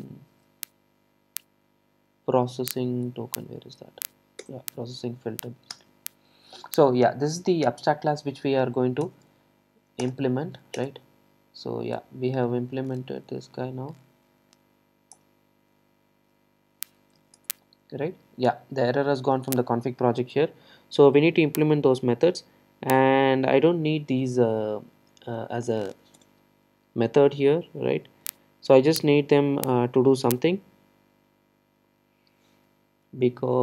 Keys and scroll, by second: 4.5 Return, 9.1 alt+Return, 17.3 super+e.